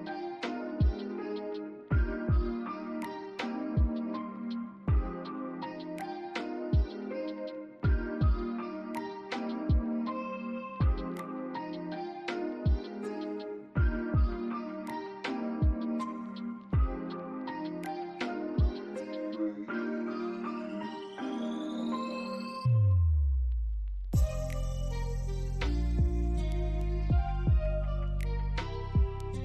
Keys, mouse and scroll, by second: 4.1 double click, 7.9 middle click, 8.6 alt+click, 9.3 scroll up 1, 9.8 alt+middle click, 10.3 alt+click, 10.9-12.5 typing, 11.7 scroll up 1, 12.1 alt+middle click, 12.7 alt+click, 13.8 alt+middle click, 15.3 alt+click, 18.0 double click, 19.8 alt+click, 20.7 alt+middle click, 20.8 alt+scroll up 1, 21.0 alt+click, 23.0 scroll down 1, 24.5 alt+click, 25.0 alt+middle click, 25.4 alt+click, 26.9 alt+scroll down 1, 27.3 middle click, 28.9 scroll down 1, 29.2 alt+middle click.